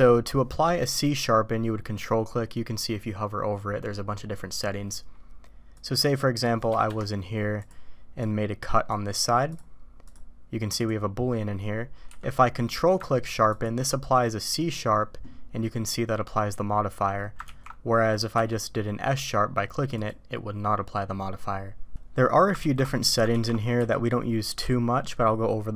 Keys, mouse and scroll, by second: 5.8-6.6 drag, 6.9 Escape, 7.6 click, 8.2-9.6 drag, 10.0 click, 10.8 drag, 12.1 q, 17.5 ctrl+z, 18.3 q, 22.6 ctrl+z, 23.3 ctrl+z, 23.8 q.